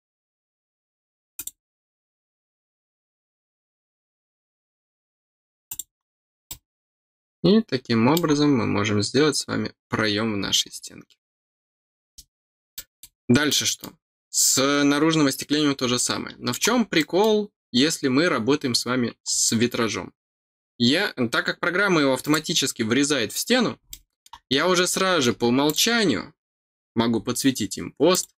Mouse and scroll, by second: 1.3 click, 5.6 click, 6.4-8.1 middle drag, 12.3 scroll down 2, 12.7 middle click, 12.9 scroll down 2, 13.4 middle click, 15.9 middle click, 16.9 middle click, 19.2 middle click, 22.2 click, 23.8 middle click, 24.4 scroll up 1, 25.6 click, 28.0 click.